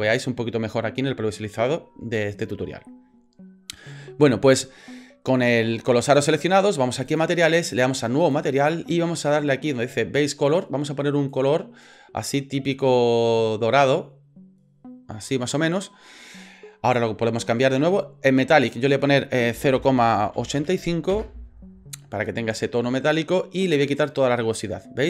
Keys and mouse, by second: 7.0 click, 8.3 click, 10.5 click, 18.6-21.7 drag, 24.1 click.